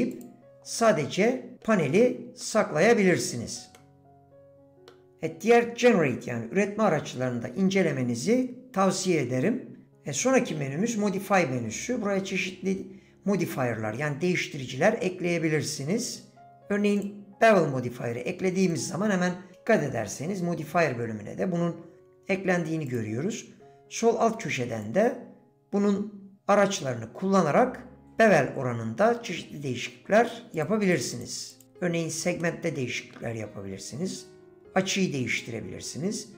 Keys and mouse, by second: 0.1 click, 0.8-1.7 middle drag, 2.4-3.0 middle drag, 3.8-4.9 middle drag, 18.7 click, 25.0-28.0 drag, 30.6 click, 31.1 click, 32.4 middle click.